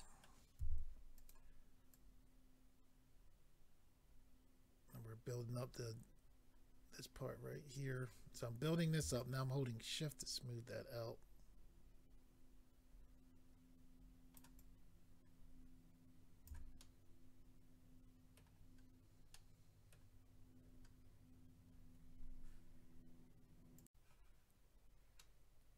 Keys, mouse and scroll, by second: 0.0 middle click, 0.6 f, 1.2 click, 1.9 click, 9.2 shift+click, 14.6 shift+click, 16.8 middle click, 18.6-19.3 scroll down 3, 19.3 middle click, 20.2-21.1 scroll up 3, 23.8 click, 24.6 click, 24.6-25.0 scroll down 3.